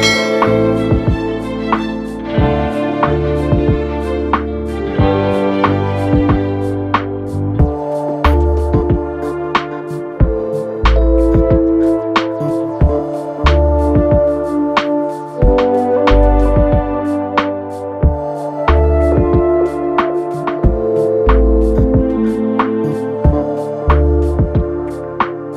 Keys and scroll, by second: 9.4 Return, 10.0 Up, 10.4 Up, 22.5 ctrl+g.